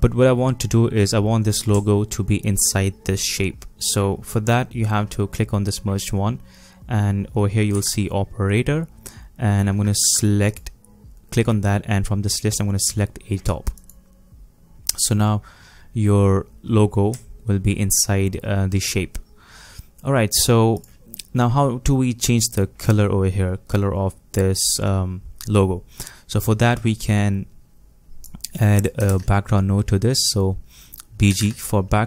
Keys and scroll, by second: 29.1 shift+space, 31.0-31.9 typing.